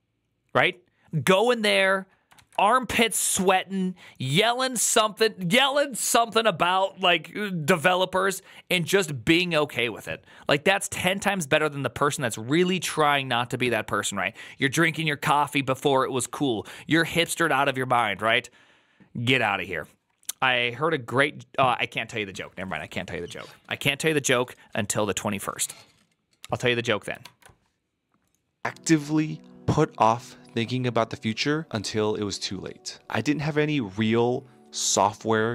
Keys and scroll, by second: 2.2 alt+[, 27.1 alt++.